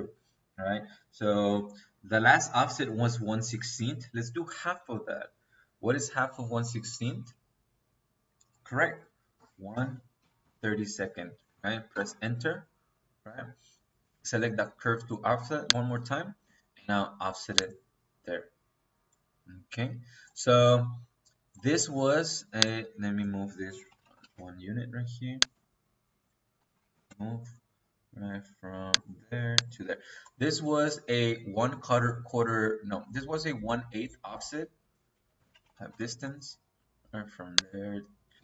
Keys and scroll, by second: 9.2 KP_1, 9.6 KP_Divide, 10.1 KP_3, 10.4 KP_2, 11.8 Return, 23.7-24.3 typing, 25.8 Escape, 26.8 o, 27.0 e, 27.0 space, 29.6 Escape, 35.0-35.8 typing.